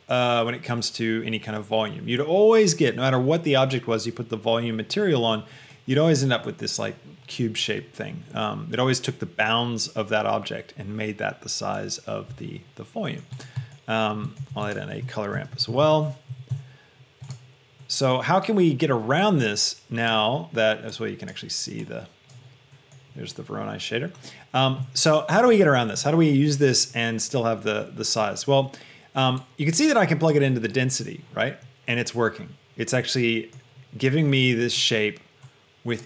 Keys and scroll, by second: 15.5 c, 15.9 l, 16.3 o, 16.5 Down, 16.9 Return.